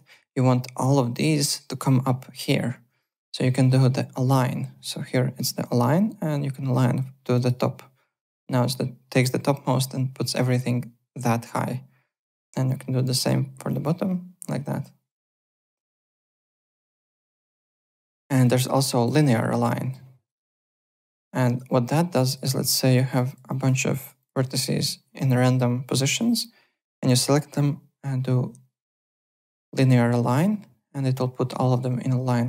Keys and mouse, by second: 7.3 click, 11.7 click, 13.7 click, 15.5 alt+Tab, 17.9 click, 18.6 click, 19.2 e, 19.9 click, 20.4 click, 21.1 4, 21.4 click, 26.3 click, 30.2 click.